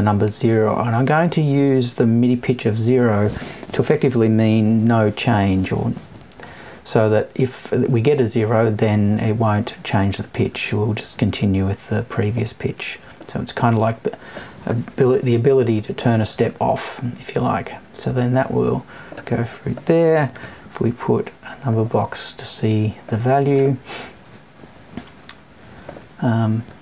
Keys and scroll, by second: 15.0 Left.